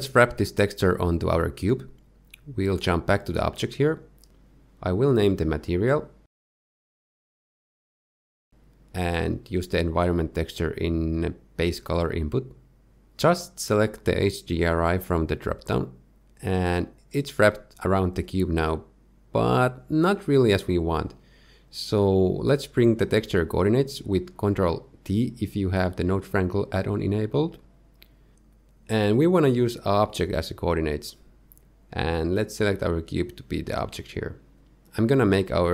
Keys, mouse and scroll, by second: 0.7 click, 2.1 click, 2.9 z, 3.8 click, 6.6 scroll down 1, 7.2 click, 8.2 o, 9.8 click, 14.2 click, 17.5 middle click, 19.2-19.8 scroll up 1, 19.8 middle click, 19.8-20.4 scroll up 2, 20.8 middle click, 22.3 middle click, 22.8-23.6 scroll up 1, 23.6-24.0 scroll down 2, 24.0 shift+middle click, 26.0 click, 27.5 ctrl+t, 28.5 click, 28.8 g, 31.2 click, 32.1 click, 34.9 middle click, 35.0 shift+middle click, 35.0 scroll down 3, 35.1 middle click, 35.5 shift+middle click, 35.5 scroll up 2, 35.5 shift+middle click.